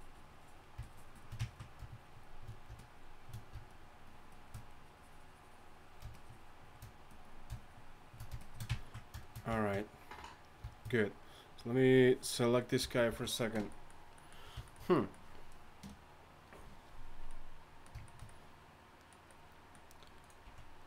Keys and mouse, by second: 12.8 z, 13.1 z, 20.4 z.